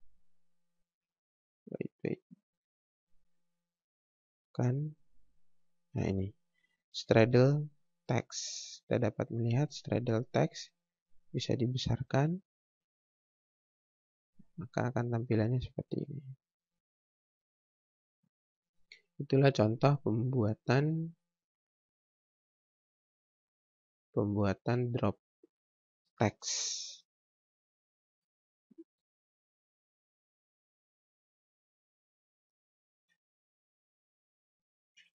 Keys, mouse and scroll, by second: 2.9 click, 8.0 click, 8.4 scroll down 1, 12.4 click, 16.3 scroll down 1, 16.7-17.4 scroll up 1, 18.2 F4, 19.6 click, 25.8 click, 33.8 Delete.